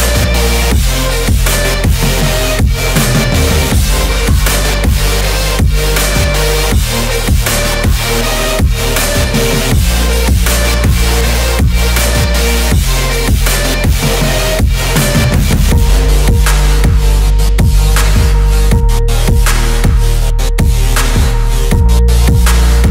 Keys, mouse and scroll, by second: 0.0 click, 1.8 click, 2.3-2.9 middle drag, 3.0-3.9 scroll down 2, 5.3-5.9 scroll down 4, 5.9 shift+a, 8.9 click, 11.0 click, 12.5 click, 16.9 click, 19.6 click, 20.8 click, 21.4-21.9 scroll up 2, 21.9-22.4 middle drag, 22.7 click.